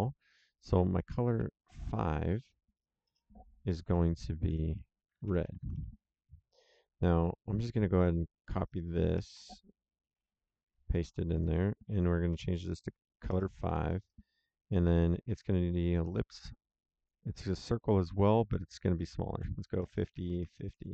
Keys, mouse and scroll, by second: 0.2 click, 1.8 End, 3.0 BackSpace, 3.9 5, 4.4 Tab, 4.9-5.9 typing, 6.6 click, 10.1 ctrl+c, 10.6 ctrl+v, 11.3 click, 12.3 Right, 13.2-14.1 typing, 18.6 click, 19.7 KP_5, 19.8 KP_0, 20.0 Tab, 20.3 KP_5, 20.4 KP_0.